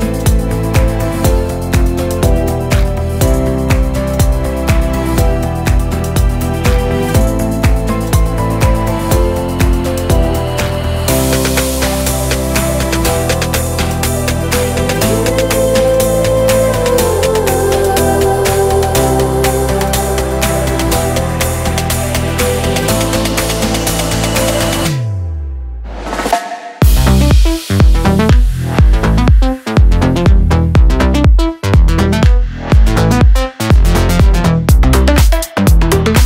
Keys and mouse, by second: 0.1 Tab, 0.5 ctrl+s, 1.3 Tab, 1.7 right click, 2.0 middle click, 2.2 middle click, 2.8 ctrl+z, 2.9 ctrl+z, 3.6 middle click, 3.8 middle click, 5.3 middle click, 6.4 z, 6.5 z, 7.1 middle click, 7.8 z, 7.9 z, 8.0 click, 8.0 z, 8.1 z, 9.0 middle click, 9.5 ctrl+z, 10.0 ctrl+z, 10.9 right click, 11.4 click, 11.7 middle click, 12.3 ctrl+z, 12.8 middle click, 13.3 middle click, 13.7 middle click, 13.9 ctrl+z, 15.7 right click, 17.2 click, 17.5 middle click, 18.6 click, 19.1 click, 19.3 a, 19.6 click, 22.2 z, 23.3 click, 23.5 a, 23.9 right click, 24.2 drag, 24.5 middle click, 24.7 click, 24.9 middle click, 25.0 l, 25.2 Delete, 25.2 l, 25.6 Delete, 25.8 Delete, 26.2 Delete, 26.4 Delete, 26.6 Delete, 27.1-31.2 typing, 27.5 Right, 28.8 Delete, 29.4 click, 29.6 right drag, 30.0 click, 30.2 drag, 30.5-31.2 middle drag, 31.6 middle click, 32.2 middle click, 32.3 a, 33.3 click, 33.4 a, 33.5 l, 33.6 Delete, 33.6 l, 34.1 Delete, 34.8 Delete, 35.2 Delete, 35.6 Delete, 35.8 middle click, 36.2 middle click, 36.2 e.